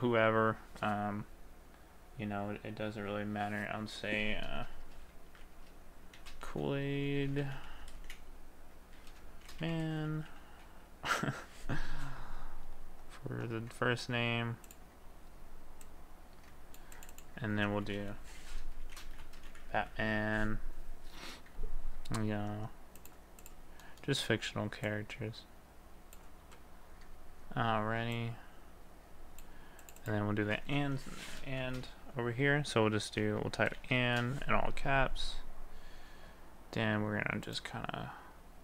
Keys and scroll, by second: 6.2 shift+k, 8.0 space, 9.4 shift+m, 17.9 ctrl+a, 19.0 b, 20.0 n, 30.3 ctrl+a, 31.6 ctrl+a, 33.8 d, 34.7 a.